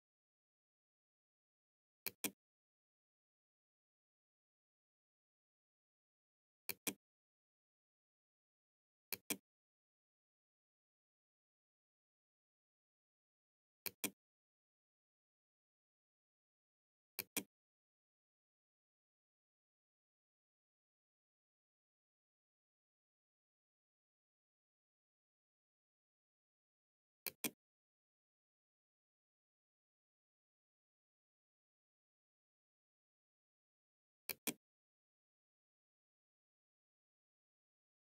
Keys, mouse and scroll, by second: 1.1-2.7 drag, 5.7 click, 8.2-9.7 drag, 12.9 click, 16.2 click, 25.9 click, 33.3 click.